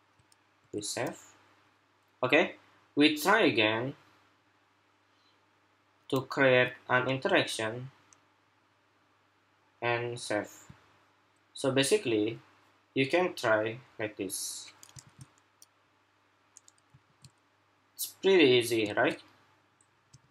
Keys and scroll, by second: 0.3 super+s, 14.7 super+r, 16.8 super+r, 18.7 super+r, 20.2 super+r.